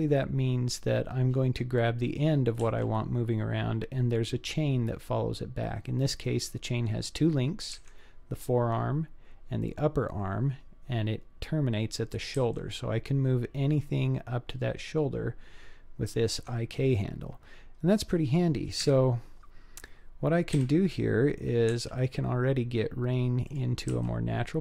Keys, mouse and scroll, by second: 2.7 g, 12.4 g, 16.9-17.9 middle drag, 18.8 KP_1, 19.7-20.5 scroll down 2, 20.5 KP_5, 21.7 g, 24.0 r.